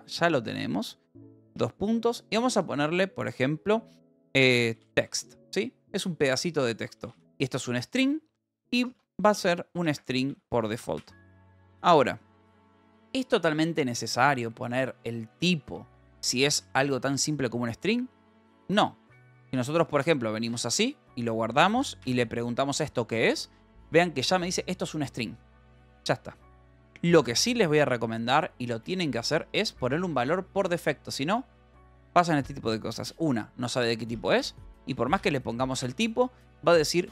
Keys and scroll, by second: 1.4 space, 4.5-9.8 typing, 10.2 Right, 11.0 ;, 11.7 ctrl+s, 12.8-20.0 typing, 21.0 ctrl+s, 21.1 h, 22.5 shift+k, 27.3 Escape, 28.4 l, 28.8 a, 29.2 BackSpace, 30.5 Escape, 32.2 a, 34.1-35.3 typing, 35.7 ctrl+s, 35.8 Escape, 36.9 ctrl+s.